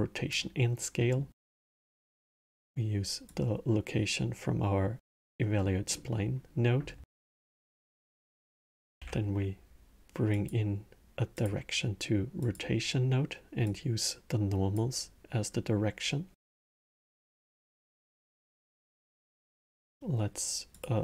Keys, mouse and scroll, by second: 0.9-3.1 middle drag, 3.1 click, 5.3-7.6 middle drag, 7.6 click, 8.8 shift+a, 13.4 click, 16.8 click, 17.8-18.6 middle drag, 18.6 shift+a.